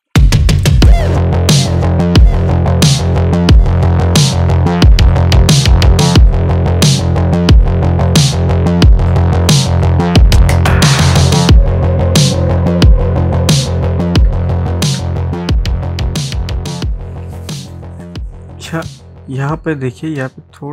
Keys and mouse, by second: 0.0 click, 0.5 space, 0.5 click, 0.7 ctrl+click, 0.9-6.8 drag, 6.8 space, 7.1 click, 7.3 space, 8.1-10.4 drag, 11.5 ctrl+z, 12.3 ctrl+z, 13.4 click, 14.4 ctrl+z.